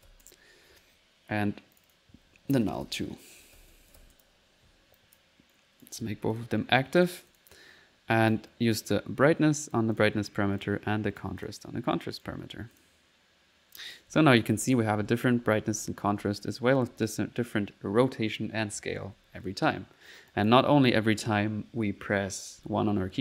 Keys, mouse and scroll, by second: 1.8 click, 4.2-4.9 typing, 5.0 click, 5.5 right click, 6.0 a, 6.3 click, 7.0 click, 7.3 click, 8.3-9.9 drag, 10.6 click, 12.0 right click, 12.8 click, 13.2-16.2 typing, 13.8 click, 14.4 click, 14.6 click, 18.3-19.3 typing, 20.3 click, 20.8 click, 23.0 middle click.